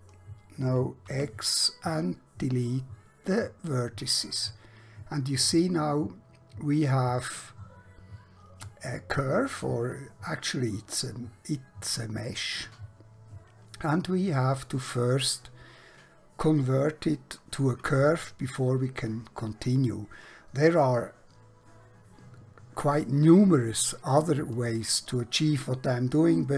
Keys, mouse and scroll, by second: 1.2 x, 3.4 click, 4.5 middle click.